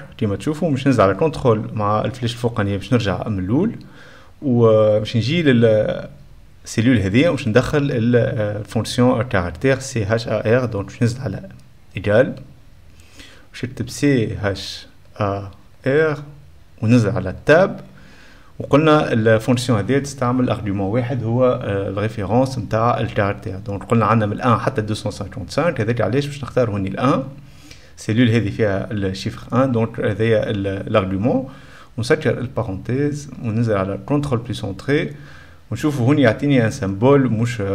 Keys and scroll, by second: 0.0-0.6 typing, 1.4 ctrl+/, 1.5 ctrl+Return, 2.3 ctrl+Up, 10.6 ], 10.7 BackSpace, 11.1 =, 12.2-16.1 typing, 17.5 Tab, 32.0-35.4 typing, 34.5 ctrl+space, 34.6 ctrl+., 34.7 ctrl+/, 34.8 ctrl+Return, 35.9 Return.